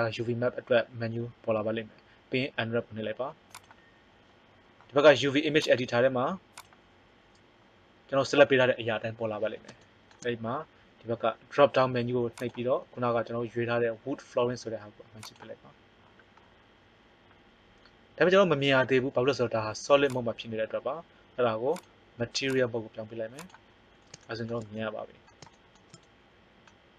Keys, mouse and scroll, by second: 5.5 click, 12.3-13.4 drag, 17.7-20.0 middle drag, 20.0 click, 26.2 middle click.